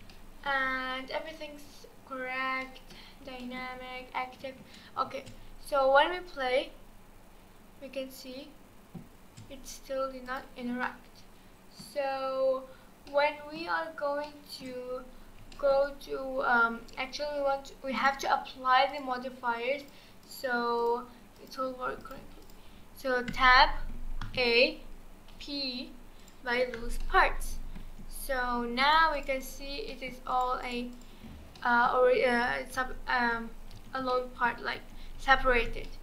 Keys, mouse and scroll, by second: 0.1-0.8 shift+middle drag, 0.8-1.5 scroll down 1, 2.6-5.1 middle drag, 5.1 space, 9.2 space, 10.3-10.8 drag, 10.8-12.0 middle drag, 12.0-12.8 scroll up 1, 12.8 scroll down 2, 13.0 scroll up 1, 13.1-13.8 middle drag, 13.8-14.2 scroll down 1, 14.2-15.1 middle drag, 15.1-15.5 scroll up 1, 15.5 shift+middle click, 15.8-16.2 scroll down 1, 16.2-17.9 scroll up 2, 18.0 click, 18.9-19.9 drag, 20.2-20.9 drag, 21.4 click, 22.4 click, 23.3 Tab, 24.2 a, 25.3 p, 27.0-27.8 middle drag, 27.8 Tab, 28.4-28.8 scroll up 1, 28.8 click, 29.1 click, 29.4 click, 29.9-30.3 middle drag, 30.3 click, 30.6 click, 30.9 click, 31.6-32.8 middle drag, 32.8 ctrl+z, 33.2 ctrl+z, 33.8 ctrl+z, 34.1-34.8 middle drag, 34.8 ctrl+z, 35.2 ctrl+z, 35.9-36.0 middle drag.